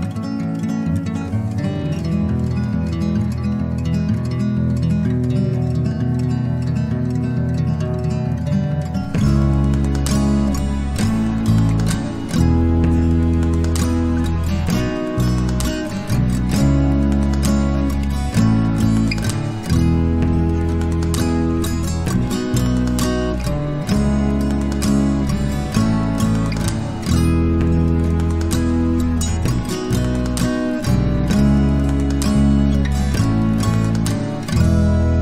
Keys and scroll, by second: 6.1 ctrl+z, 9.2 x, 10.6 x, 21.1 ctrl+d, 22.8 alt+0, 25.3 ctrl+0.